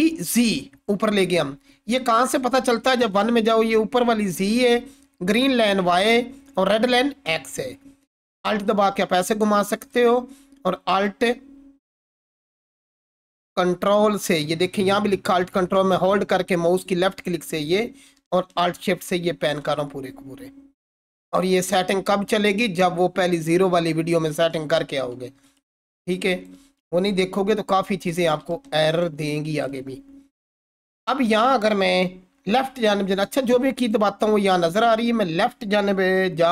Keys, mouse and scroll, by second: 8.3-9.6 alt+drag, 9.9-14.6 ctrl+alt+drag, 18.2-19.8 alt+shift+drag, 20.7-22.0 scroll up 1, 25.5-26.5 alt+drag, 27.1-28.1 ctrl+alt+click, 28.4-29.1 alt+shift+drag, 30.0-31.9 scroll down 1, 33.8 click.